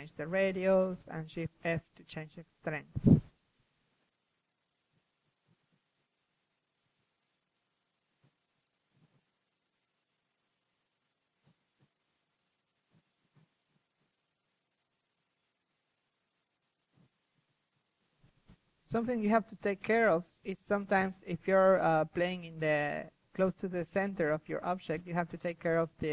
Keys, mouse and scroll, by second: 0.3 f, 6.4 ctrl+z, 6.6 ctrl+z, 6.8 ctrl+z, 6.9 ctrl+z, 7.0 ctrl+z, 7.3 KP_3, 7.7 ctrl+z, 7.8 ctrl+z, 7.9 ctrl+z, 8.1 ctrl+z, 8.3 ctrl+z, 8.5 ctrl+z, 8.7 ctrl+z, 9.0-10.1 drag, 10.3 click, 14.6 KP_3, 15.2 ctrl+z, 15.4-16.0 ctrl+z, 16.2 ctrl+z, 16.3 ctrl+z, 16.5 ctrl+z, 16.7 ctrl+z, 17.3 ctrl+z, 17.9 f, 18.2-21.7 drag, 21.5 KP_1, 22.1-23.0 middle drag, 23.0-24.1 drag, 23.4 KP_3, 25.6 KP_1.